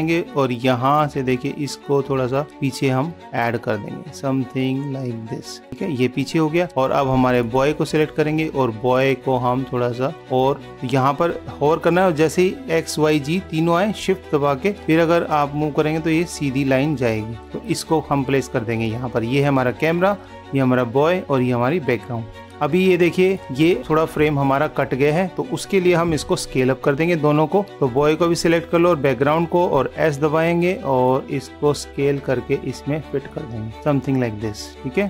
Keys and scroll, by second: 22.4 super+-, 26.5 super+=, 28.8 super+-.